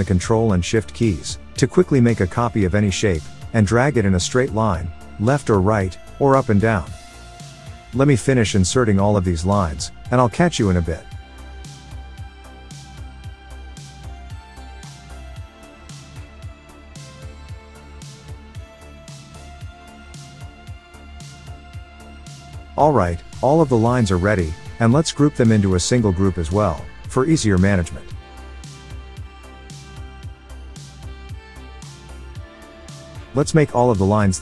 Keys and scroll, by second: 27.5 super+a, 28.8 alt+super+g, 30.0 shift+l, 30.5 Return.